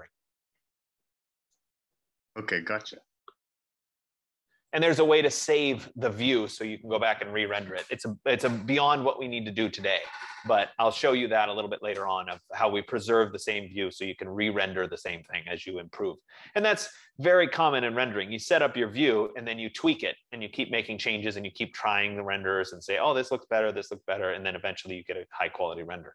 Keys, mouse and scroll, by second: 1.7-2.9 right drag, 6.0 click, 9.9-11.0 drag.